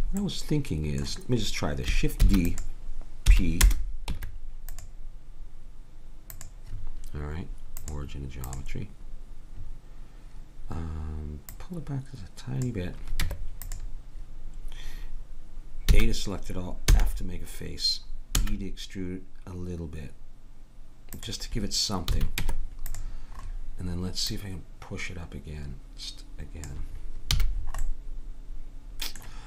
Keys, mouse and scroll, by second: 2.2 shift+d, 3.3 p, 4.1 Tab, 6.3-8.6 drag, 13.2 Tab, 15.9 a, 16.9 f, 18.4 e, 22.1 a, 22.4 Tab, 24.2-26.2 drag, 27.4 a, 27.8-29.0 middle drag.